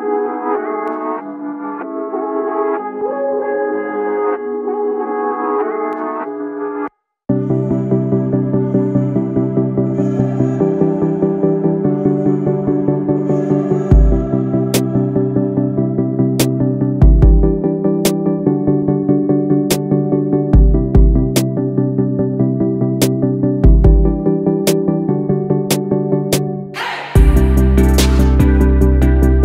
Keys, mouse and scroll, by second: 0.8 click, 1.7 e, 8.6 click, 9.3 ctrl+a, 12.4 click, 13.2 ctrl+a, 15.1 click, 17.7 ctrl+a, 18.9 click, 20.2 ctrl+a, 21.6 click, 22.3 ctrl+a, 24.8 click, 25.3 scroll down 2, 26.4 scroll up 2, 27.1-28.1 drag, 28.1-28.8 scroll up 2, 28.8-29.4 drag.